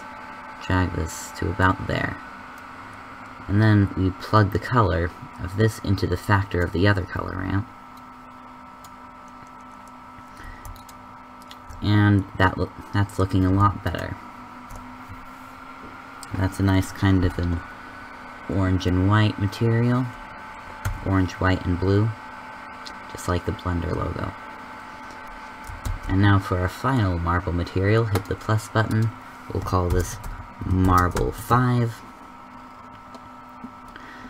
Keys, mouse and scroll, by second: 9.3 click, 26.5 shift+z.